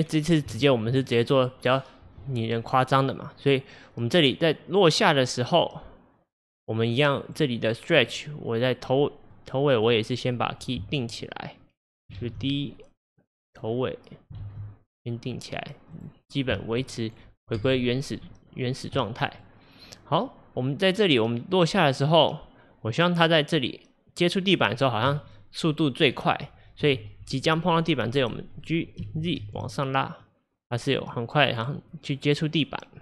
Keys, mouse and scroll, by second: 0.0 scroll up 2, 0.6-3.3 shift+middle drag, 3.3-6.2 drag, 8.1 click, 9.3-12.3 drag, 12.3 shift+d, 14.5 shift+d, 17.0 middle click, 17.6 KP_0, 19.0 middle click, 19.5-20.0 scroll up 2, 20.9-23.9 drag, 25.4-26.9 middle drag, 26.9 KP_1, 29.0 g.